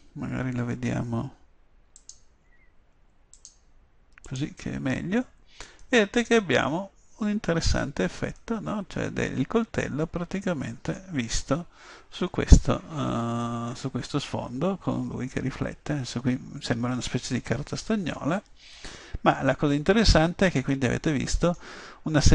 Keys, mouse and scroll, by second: 0.0 Escape, 2.1-3.2 drag, 6.2-9.0 middle drag, 20.4 middle click.